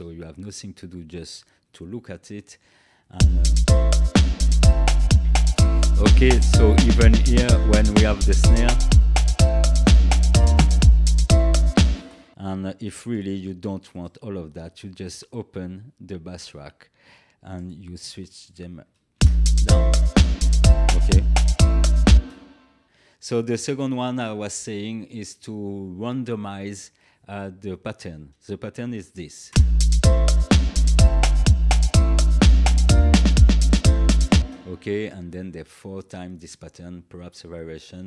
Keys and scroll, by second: 3.1 space, 11.9 space, 19.1 space, 22.1 space, 29.5 space, 34.3 space.